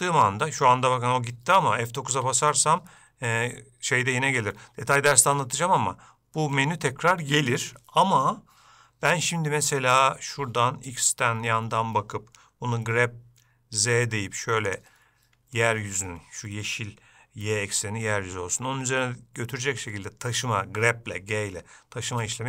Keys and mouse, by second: 2.5 F9, 3.2 F9, 13.0 g, 15.7 shift+middle click.